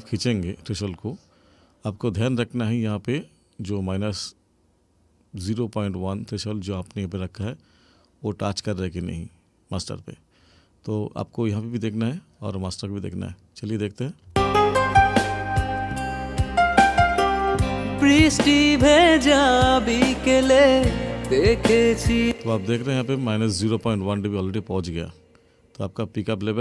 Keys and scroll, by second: 14.3 space, 22.2 space.